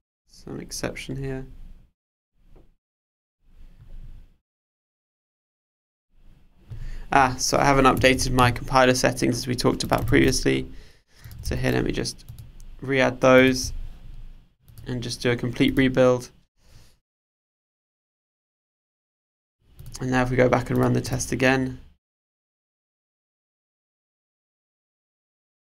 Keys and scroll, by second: 8.1 super+1, 10.0 super+c, 11.5 super+v.